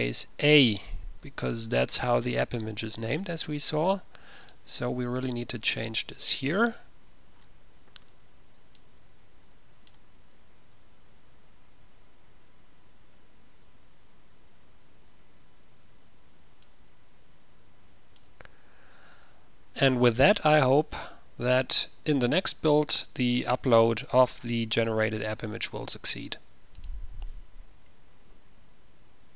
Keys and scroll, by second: 1.6 Return, 1.6 typing, 10.6 a, 18.5 a.